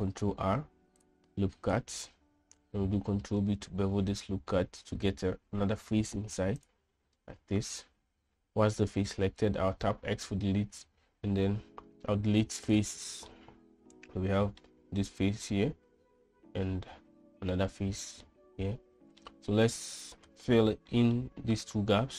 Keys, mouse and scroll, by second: 0.3 ctrl+r, 2.1 ctrl+r, 3.9 ctrl+b, 10.2 x, 13.7-15.0 middle drag, 15.9-18.0 middle drag, 18.6 middle click, 21.3 middle click.